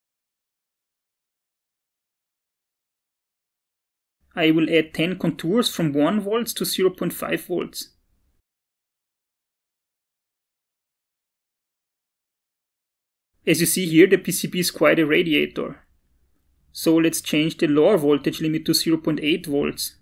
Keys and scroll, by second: 6.3-8.4 typing, 6.9 shift+Tab.